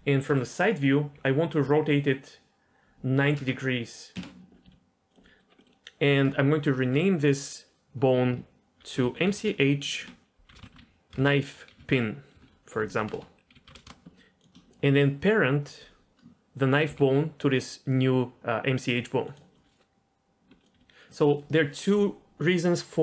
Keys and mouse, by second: 0.3 KP_3, 1.1 r, 4.6 s, 5.3 middle click, 5.6 middle click, 6.8 F2, 13.1 BackSpace, 14.4 click, 16.9 ctrl+p, 20.4 Tab, 20.6 click, 20.7 r.